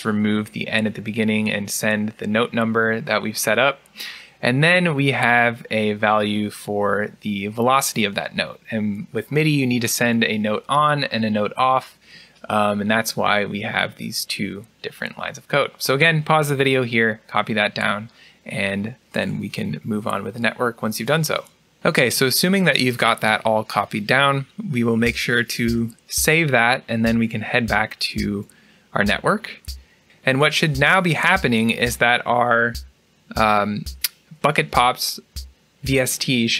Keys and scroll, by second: 27.1 ctrl+s.